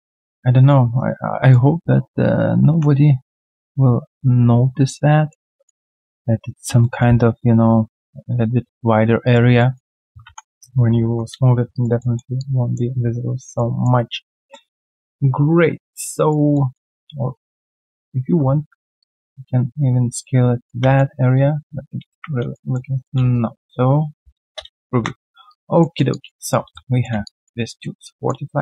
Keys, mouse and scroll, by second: 0.9 alt+right click, 5.1 alt+right click, 5.5 alt+middle click, 5.8 alt+right click, 6.8 alt+middle click, 7.0 alt+scroll down 1, 9.2 alt+right click, 9.5 alt+middle click, 10.8-11.5 typing, 11.7 alt+right click, 12.0 alt+middle click, 12.3 alt+click, 13.5 alt+middle click, 14.5 alt+middle click, 16.1 alt+right click, 16.5 alt+middle click, 16.8 alt+right click, 20.9 alt+middle click, 22.5 alt+middle click, 22.9 alt+right click, 23.1 q, 23.3 right click, 24.4 scroll down 1, 24.4 space, 25.4 alt+click, 25.8 alt+middle click, 26.1 alt+click, 26.4 alt+right click, 26.7 right click, 26.7 q, 27.2 alt+click, 27.6 alt+middle click, 28.0 alt+click.